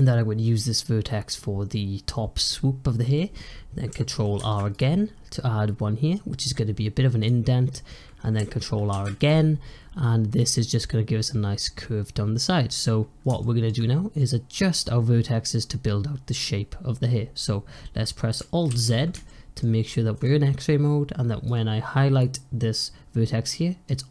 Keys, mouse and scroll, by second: 4.3 ctrl+r, 8.8 ctrl+r, 12.6 scroll down 1, 12.9-13.3 scroll up 1, 13.3-14.8 shift+middle drag, 14.8-15.5 scroll up 1, 15.5-15.9 scroll down 1, 15.9-18.3 scroll up 1, 18.3 scroll up 1, 18.6 alt+z, 19.1-21.3 shift+middle drag, 21.3 click, 23.7-24.1 middle drag.